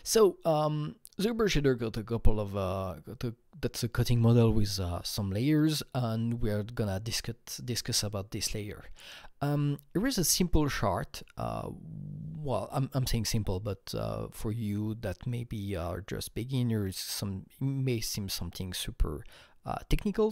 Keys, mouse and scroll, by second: 9.6 Right.